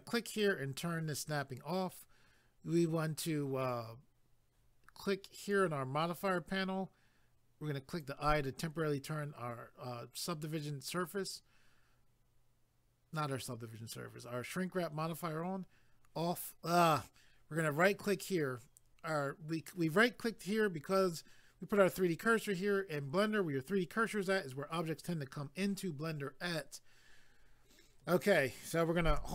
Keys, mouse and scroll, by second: 0.3 click, 5.4 click, 7.9 click, 17.8 right click.